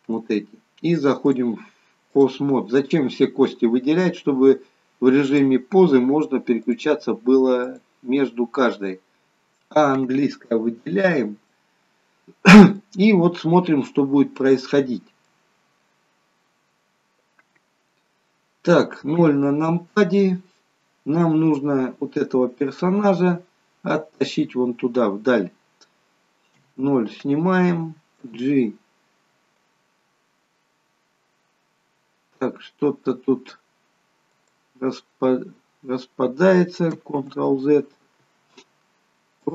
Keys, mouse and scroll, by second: 1.2 click, 6.5 click, 7.6 click, 9.3-9.7 scroll up 2, 9.3 a, 11.4 middle click, 12.9 scroll down 3, 14.0-14.5 scroll down 3, 14.5 middle click, 15.5-16.0 scroll down 1, 19.1 KP_0, 26.5 KP_0, 28.3 g, 35.1 scroll up 2, 37.6 ctrl+z, 39.4 click.